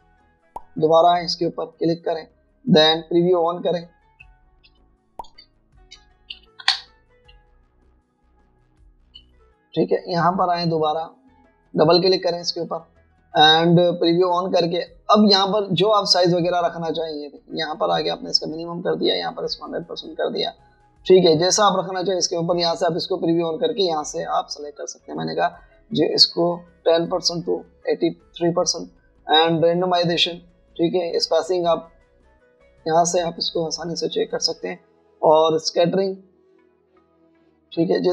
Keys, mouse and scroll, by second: 5.3 Escape, 7.4-8.3 typing, 9.9 alt+scroll down 1, 10.0-11.5 typing, 11.6 alt+scroll up 1, 12.7 double click.